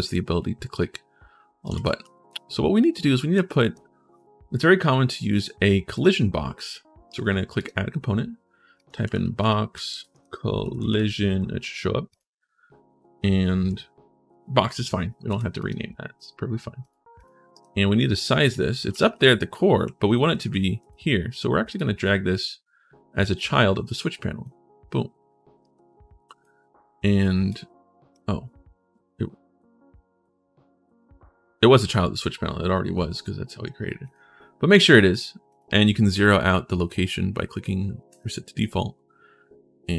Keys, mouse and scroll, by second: 1.2-3.1 typing, 1.4-2.9 right drag, 7.3 click, 8.5 click, 9.5 x, 9.9 c, 11.9 click, 15.3 click, 16.6 click, 16.9 click, 17.1-20.3 typing, 17.3-18.6 right drag, 21.5-24.2 drag, 25.3-26.2 typing, 25.4 click, 33.8 click, 35.3 click, 37.9 click.